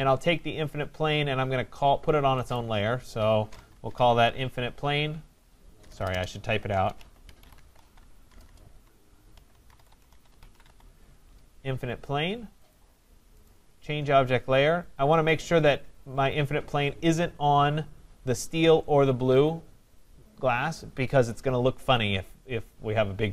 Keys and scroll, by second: 5.7 BackSpace.